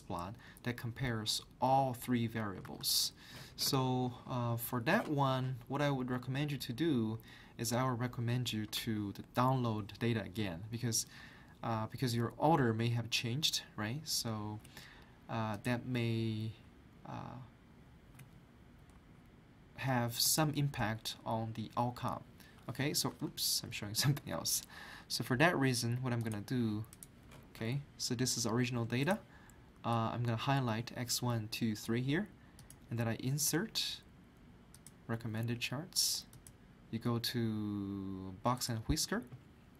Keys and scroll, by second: 2.6 alt+Tab, 10.4 ctrl+z, 11.2 ctrl+z, 23.1 alt+Tab.